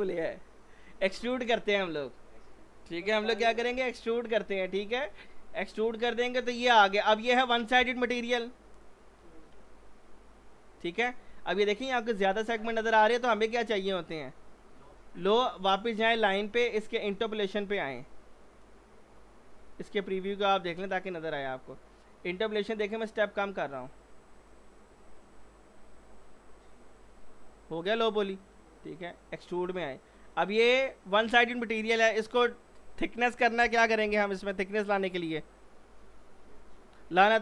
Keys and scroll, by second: 3.1 e, 3.3 x.